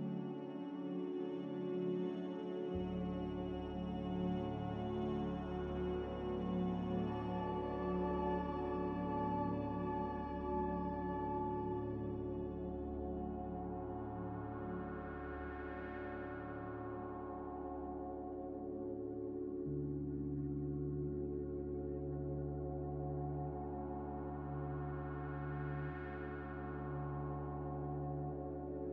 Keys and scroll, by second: 1.6 2, 5.5 1, 8.3 2, 21.3 a, 23.4-24.4 typing, 25.7-27.7 typing.